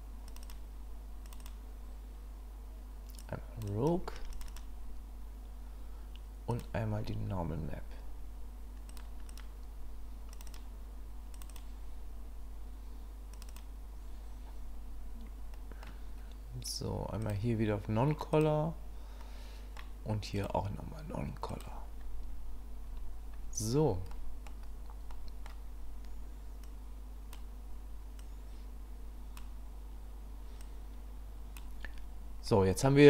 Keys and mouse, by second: 6.6 click, 15.7 middle click, 17.2-18.4 drag, 19.3 middle click, 20.4-21.6 drag, 24.3 middle click, 25.2 middle click, 26.7 click, 28.2-29.5 drag, 30.6 click.